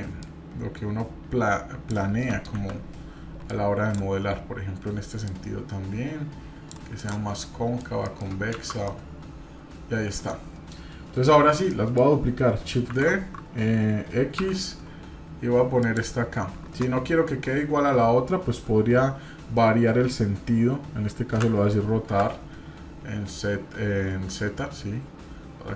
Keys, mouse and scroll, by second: 0.2-1.9 drag, 2.5 KP_1, 3.5 click, 4.6-5.2 scroll up 1, 5.2-6.7 drag, 7.0 click, 7.3 middle click, 7.8 scroll down 1, 8.0 middle click, 8.5 shift+z, 8.9-11.0 middle drag, 11.0-11.3 scroll down 1, 11.3 Tab, 11.7 middle click, 12.9 shift+d.